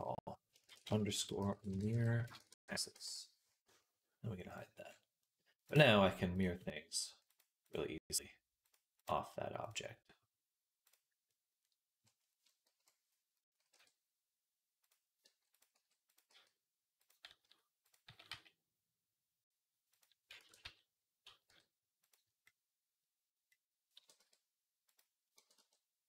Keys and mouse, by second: 1.5 r, 4.4-12.6 right drag, 7.1-8.6 drag, 8.8-10.7 drag, 12.6-22.3 drag, 12.6 KP_1, 13.6 r, 15.1-18.0 typing, 20.2 ctrl+a, 21.3 g, 23.8 g, 25.2 g.